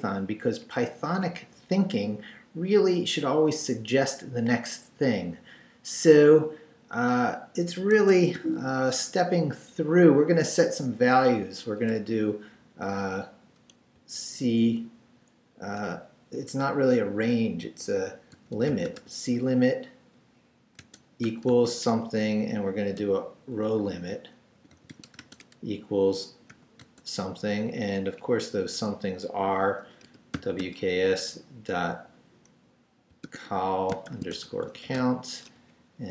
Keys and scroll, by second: 0.6 Up, 8.0 Escape, 8.4 o, 14.0 c, 18.1-19.5 typing, 20.8 space, 21.2 =, 21.5 space, 21.9 Return, 23.0-26.8 typing, 28.1 Up, 29.8-31.2 typing, 33.1-36.1 typing, 35.6 Down.